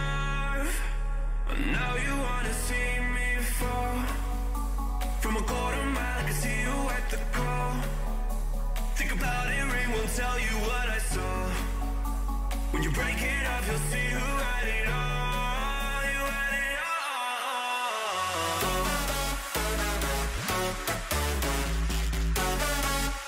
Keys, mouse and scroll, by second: 0.6 b, 2.0 g, 4.7 a, 6.0 b, 7.6 g, 14.3 a, 15.1-17.0 middle drag, 15.5 b, 17.0 g, 22.3 a, 22.9-23.2 middle drag.